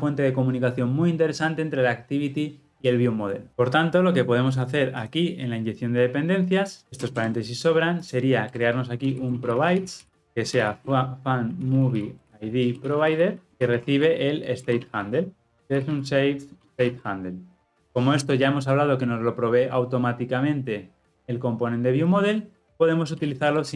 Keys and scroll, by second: 10.3 Return, 17.7 Return.